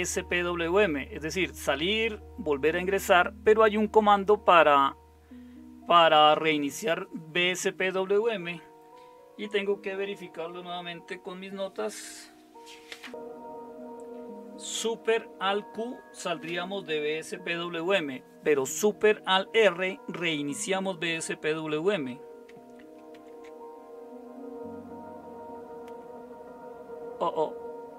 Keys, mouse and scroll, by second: 23.1 alt+super+r.